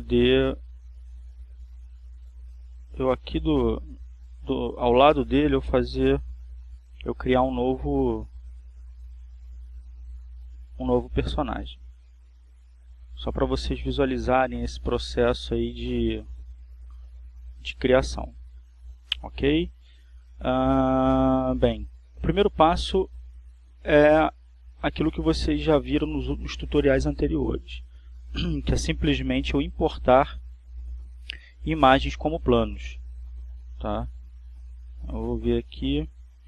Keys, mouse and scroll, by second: 1.0 alt+r, 1.9 right click, 2.6 alt+r, 3.0 alt+right click, 3.4 alt+r, 4.3 alt+right click, 4.7 alt+r, 5.3 alt+right click, 6.5 alt+r, 7.1-8.1 alt+right drag, 7.6 alt+r, 9.3-10.6 shift+middle drag, 10.6-11.2 shift+scroll down 3, 11.3-11.9 scroll up 3, 11.9-14.7 shift+middle drag, 15.7-19.0 drag, 19.1 click, 22.6 a, 30.3 click, 33.8 click, 35.3 click.